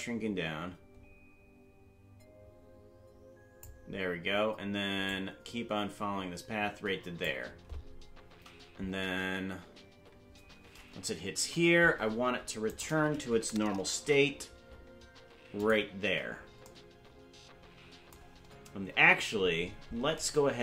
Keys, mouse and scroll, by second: 5.1-7.3 drag, 11.5 Right, 12.7 right click, 13.9 shift+d, 19.5-20.2 scroll up 9.